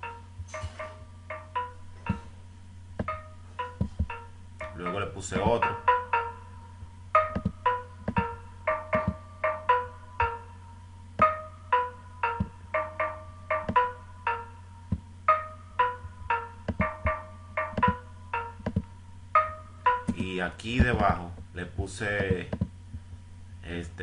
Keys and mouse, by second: 2.2 click, 4.0 right click, 5.6-6.2 right drag, 8.3 right click, 9.0 click, 9.9 right click.